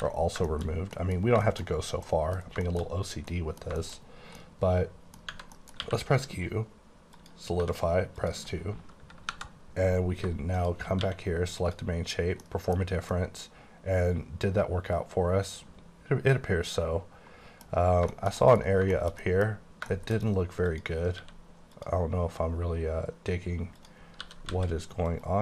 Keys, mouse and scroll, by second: 0.0 ctrl+x, 0.2 ctrl+scroll down 3, 0.5 shift+middle click, 3.8 shift+middle click, 4.7 middle click, 5.4 Tab, 5.5 middle click, 5.9 q, 7.1 click, 7.6 2, 8.2 click, 9.4 KP_Divide, 10.5 shift+click, 11.0 q, 11.6 click, 12.4 middle click, 12.8 scroll down 4, 13.1 middle click, 17.7 scroll up 4, 18.1 shift+middle click, 18.7-19.8 scroll up 4, 19.0 middle click, 19.3 middle click, 20.0 shift+middle click, 20.3 scroll up 1, 20.8 click, 21.2 q, 21.8 click, 22.8-23.9 scroll down 3, 23.9 click, 24.3-25.4 typing, 25.1 right click.